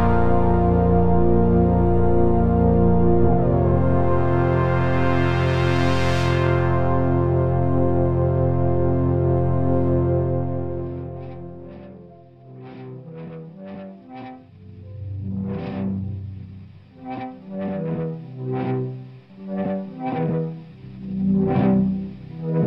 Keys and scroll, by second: 2.8 8, 4.7 Return, 7.8 8, 13.0 8, 13.3 Return, 18.9 ctrl+z.